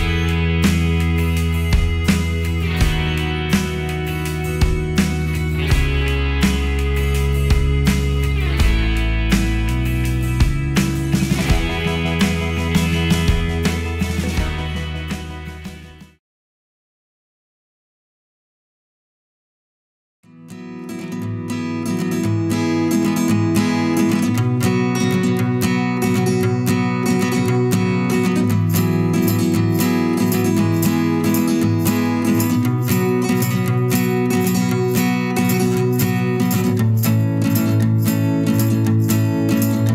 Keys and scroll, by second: 28.8 ctrl+j.